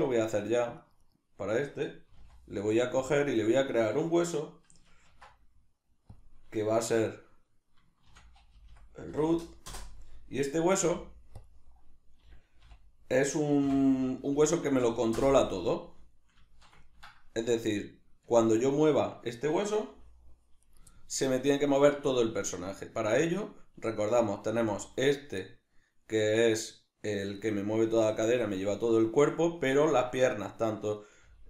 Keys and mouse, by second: 0.0 right click, 0.4 right click, 0.8 right click, 1.0 right click, 2.1 g, 3.1 click, 3.4 right click, 5.1 ctrl+alt+s, 6.2 click, 6.9 F2, 10.9 ., 12.3 r, 15.6-20.7 middle drag, 18.3 Tab, 20.7 right click, 20.9-24.1 ctrl+middle drag, 24.1 right click, 24.5 g, 27.5 right click, 31.0 right click, 31.2 g.